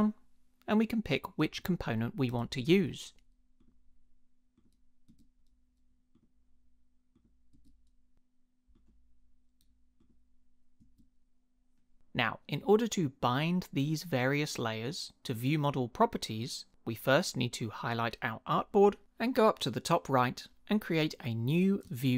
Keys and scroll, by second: 2.3 Return, 5.1 Return, 7.5 Return, 10.8 Return.